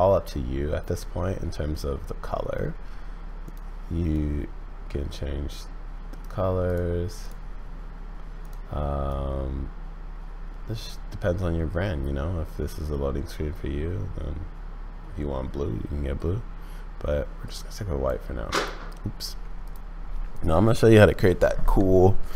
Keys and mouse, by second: 2.4 middle click, 8.4 click.